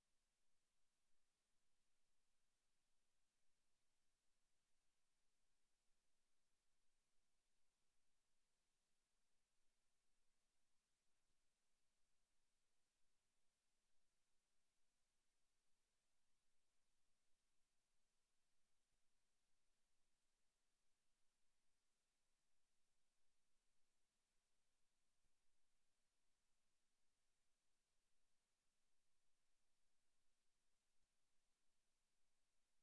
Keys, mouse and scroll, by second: 2.3 s, 3.3 click, 3.5 middle click, 4.1 shift+middle click, 4.6 middle click, 5.8 middle click, 6.4 shift+middle click, 6.9 middle click, 7.5 shift+middle click, 8.0 middle click, 8.6 shift+middle click, 9.1 scroll up 3, 9.5 shift+middle click, 11.0 click, 11.9-12.3 scroll down 2, 12.4 s, 13.3 click, 13.5 Tab, 14.3 Tab, 14.5 right click, 14.9 Tab, 15.3-15.7 scroll up 4, 16.8 Tab, 18.1 Tab, 18.9 right click, 19.3 right click, 20.8 click, 21.7 a, 23.2 KP_7, 23.9 shift+middle click, 24.8 e, 25.4 click, 26.1 click, 28.6 ctrl+r, 30.8 click, 31.0 s, 32.2 click, 32.4 a.